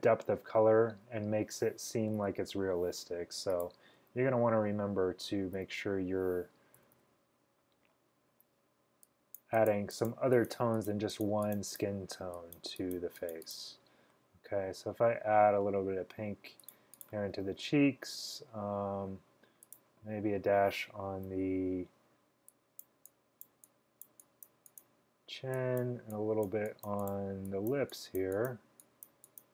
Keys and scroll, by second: 2.3 ], 5.7 b, 6.9-8.8 typing, 11.5 typing, 21.1-21.9 typing.